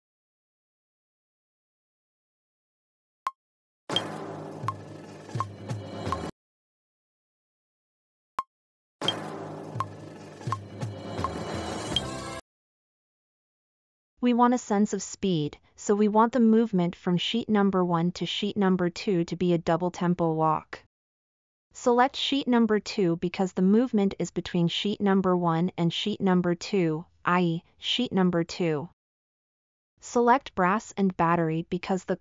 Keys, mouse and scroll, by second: 3.2 space, 6.6 space, 8.3 space.